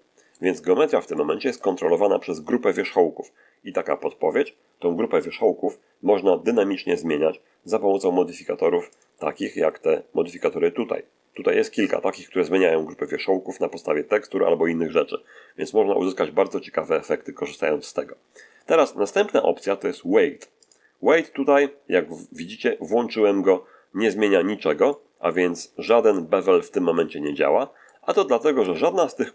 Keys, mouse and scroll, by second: 1.0-1.7 shift+middle drag, 8.9 click, 20.5 click, 24.8-26.0 middle drag, 28.5 Tab.